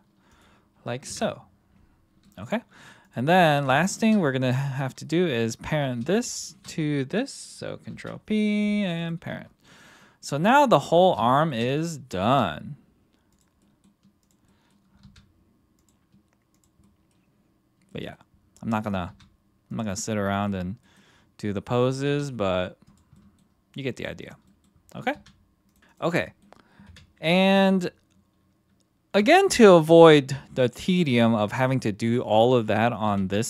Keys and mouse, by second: 0.4 click, 1.1 KP_1, 2.2 middle drag, 7.9 ctrl+p, 9.0 click, 9.7-10.3 middle drag, 10.8 middle drag, 11.3 shift+middle drag, 11.7 middle drag, 12.3 r, 13.3 click, 13.6 middle click, 14.5 middle drag, 15.0 r, 15.8 drag, 16.5 click, 16.8-17.1 middle drag, 17.9 middle click, 18.7 middle click, 19.1 r, 20.0-20.4 middle drag, 20.8 middle click, 21.9 click, 22.0 r, 22.8-23.1 drag, 23.1 middle drag, 24.4 middle drag, 25.7 r, 25.7 r, 26.2 middle drag, 26.8 KP_1, 32.3 click, 33.1 g.